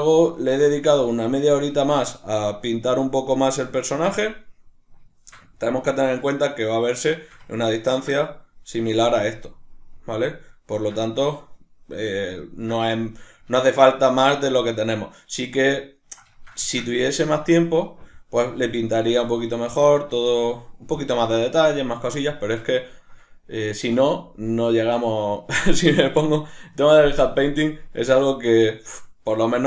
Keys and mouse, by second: 2.7 middle click, 3.8-29.6 ctrl+middle drag.